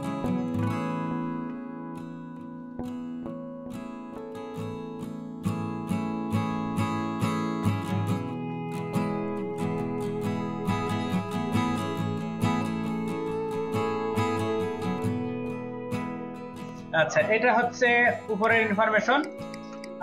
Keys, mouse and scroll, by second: 0.0 ctrl+middle click, 0.3 double click, 0.5 ctrl+middle click, 0.6 ctrl+click, 1.2 shift+middle click, 1.8 ctrl+middle click, 2.0 ctrl+double click, 2.6 middle click, 2.6 ctrl+alt+click, 3.5-5.6 ctrl+drag, 6.2 ctrl+click, 7.0 double click, 8.8 double click, 9.9 shift+click, 11.6 double click, 13.2 ctrl+double click, 14.4 ctrl+double click, 14.4 ctrl+middle click, 15.0 ctrl+alt+double click, 16.2 ctrl+alt+click, 17.0 ctrl+click, 18.5 shift+middle click, 19.4 ctrl+alt+click, 19.9 middle click.